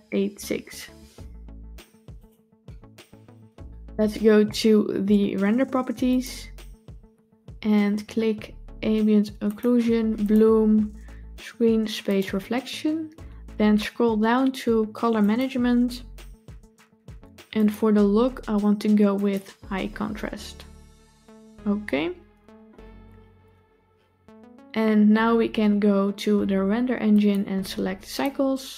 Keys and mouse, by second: 2.0 click, 5.9 click, 9.4 click, 10.1 click, 12.0 click, 15.1 click, 17.5-19.3 drag, 27.0-28.2 drag.